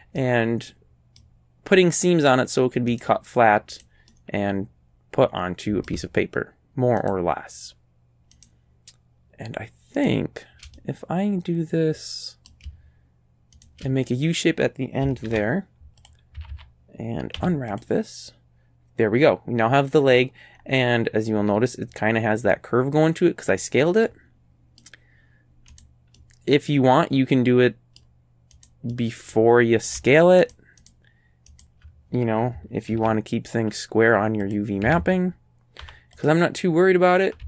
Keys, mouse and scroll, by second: 0.2-1.4 middle drag, 3.0 right click, 3.8 right click, 4.1-5.4 middle drag, 5.4 click, 7.1 shift+right click, 7.3-8.4 shift+middle drag, 8.4 shift+right click, 10.0 shift+right click, 10.8-11.8 shift+middle drag, 11.8 click, 13.6 shift+right click, 15.3 ctrl+e, 16.1 click, 16.4 a, 16.5 a, 17.4 u, 17.8 click, 20.2-20.8 scroll up 4, 24.0 middle click, 25.0-25.7 scroll up 1, 25.7 scroll up 1, 25.8 right click, 26.2-28.2 middle drag, 28.6 right click, 28.9-30.1 middle drag, 30.5 shift+right click, 30.9 shift+right click, 31.5 shift+right click, 32.9 ctrl+e, 34.5 click, 34.9 a, 35.0 a, 35.9 u, 36.2 click, 37.0-37.4 scroll down 1.